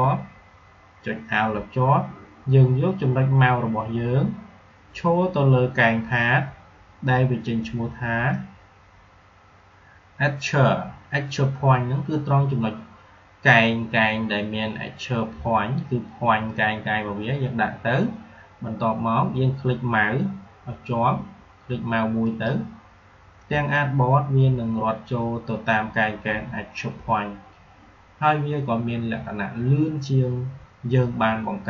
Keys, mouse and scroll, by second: 22.2 alt+shift+click.